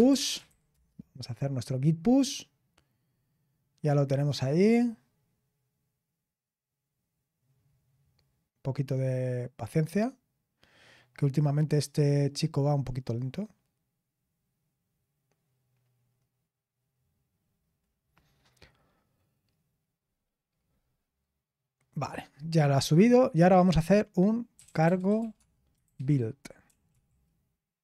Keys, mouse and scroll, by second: 0.0-1.2 typing, 26.6-27.4 typing.